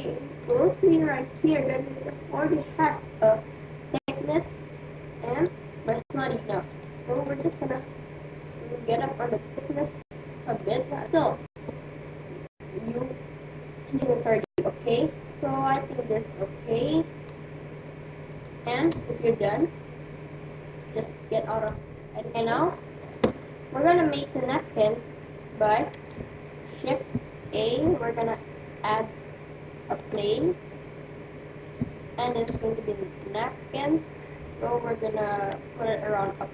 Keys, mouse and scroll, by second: 5.4-9.3 drag, 8.0-10.7 middle drag, 15.6-17.4 drag, 16.7-20.3 middle drag, 21.8 Tab, 25.9 shift+a, 27.5 shift+a, 30.7-33.7 middle drag, 33.7-35.1 drag.